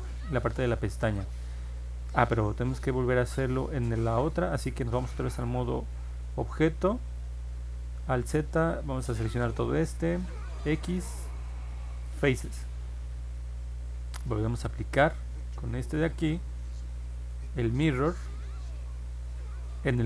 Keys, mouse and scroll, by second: 2.1 ctrl+Tab, 7.0 alt+z, 8.7 click, 10.6 x, 12.0 click, 15.0 click, 16.2 click, 17.8 click.